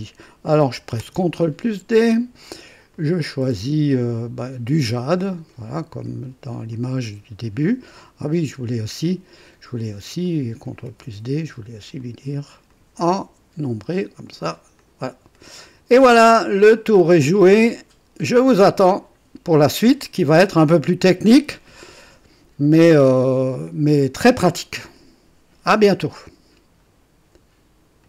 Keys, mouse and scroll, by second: 1.0 ctrl+d, 2.9 click, 4.4 click, 6.0 click, 6.7 click, 10.2 click, 10.9 ctrl+d, 12.0 click, 12.7 click, 13.2 click, 14.3 click, 14.8 click, 15.3-17.3 drag, 17.9 scroll up 1, 18.4 right click, 26.8 right click, 28.0 click.